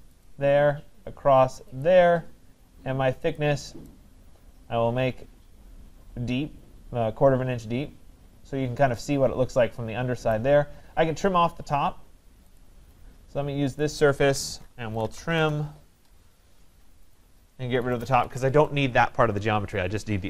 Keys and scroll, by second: 15.3 Return, 18.1 Escape.